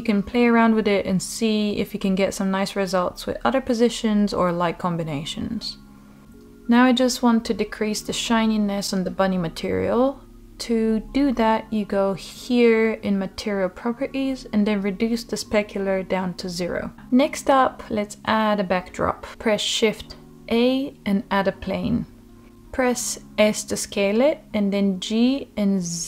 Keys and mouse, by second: 0.3 middle click, 0.7 g, 2.4 click, 7.3 click, 8.9 click, 12.2-13.4 drag, 13.7-14.6 middle drag, 15.8-17.4 drag, 18.1 middle click, 19.6 shift+a, 23.1 middle click, 23.9 s, 25.8 click.